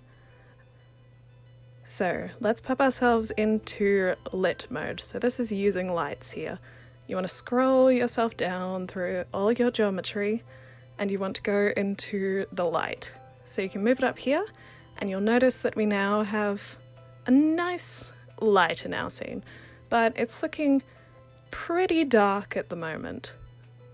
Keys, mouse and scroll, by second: 0.3-1.0 alt+drag, 1.5-4.0 alt+drag, 4.5 click, 7.5 click, 9.6-12.1 drag, 12.4 click, 13.8-14.7 alt+drag, 16.6 click, 18.8 click, 19.7-22.2 alt+drag, 23.1-23.9 alt+right drag.